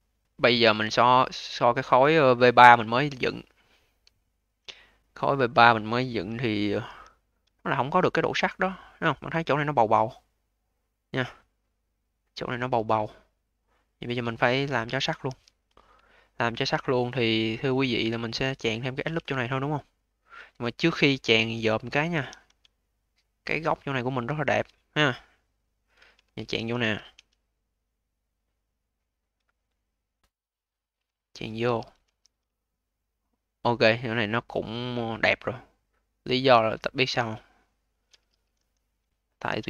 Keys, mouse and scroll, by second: 1.3-3.5 scroll down 12, 3.5 click, 4.0 alt+middle click, 4.6-6.7 scroll up 9, 6.7 v, 7.2-8.3 scroll up 5, 8.3-11.3 alt+middle drag, 13.8-14.2 scroll down 3, 14.2 alt+middle click, 14.7 q, 15.2 v, 16.0-17.2 alt+middle drag, 17.2 click, 17.8-18.5 scroll up 4, 18.5 click, 19.0 a, 21.2 q, 21.7 scroll up 2, 22.0 v, 22.6-26.1 alt+drag, 26.1 q, 26.4 v, 27.0 a, 31.5 q, 31.9 v, 32.4-34.3 alt+drag, 34.3-35.2 scroll up 4, 35.2-38.1 alt+drag, 38.1 q, 38.4 v, 39.0-39.6 scroll down 5.